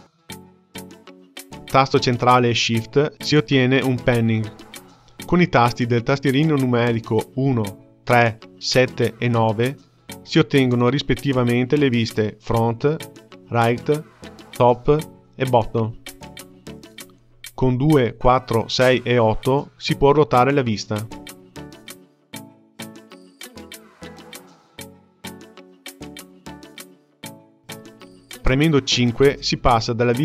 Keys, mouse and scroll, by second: 1.9-4.9 shift+middle drag, 12.4 KP_1, 13.3 KP_3, 14.6 KP_7, 15.4 KP_9, 19.3 KP_2, 19.4-19.9 KP_2, 20.0 KP_2, 21.4-25.8 typing, 29.4 KP_5.